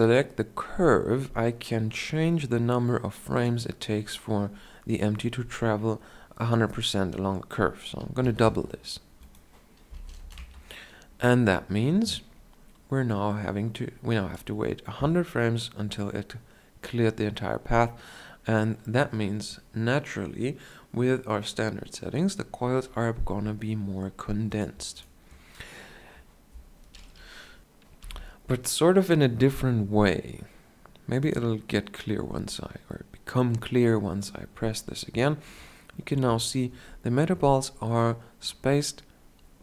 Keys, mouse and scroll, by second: 10.8-13.3 drag, 10.8 KP_0, 13.7-15.4 drag, 15.7 middle click, 16.6-18.6 drag.